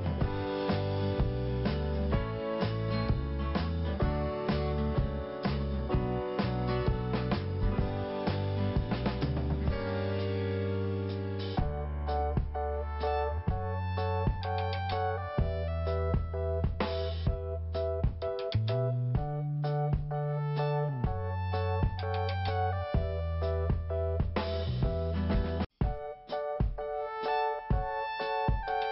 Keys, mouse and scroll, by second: 3.9 click, 4.0 click, 5.3 right click, 6.5 click, 6.6 click, 8.0 click, 8.1 click, 9.1 click, 9.2 click, 10.8 click, 10.8 click, 11.3 click, 11.4 click, 12.4 click, 12.5 click, 13.0 click, 15.7 click, 17.7-18.2 scroll down 1, 18.8 click, 18.9 click, 19.5 click, 21.2 click, 21.6 click, 23.3 click, 26.6 click, 26.9 click, 28.1 click, 28.3 click.